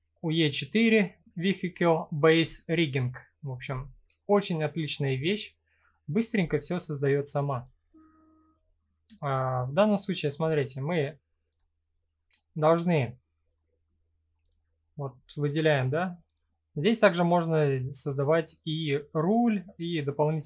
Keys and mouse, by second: 4.0 middle click, 6.0 click, 7.1 click, 10.0 click, 14.1 click, 15.9 click, 17.7 click, 20.3 click.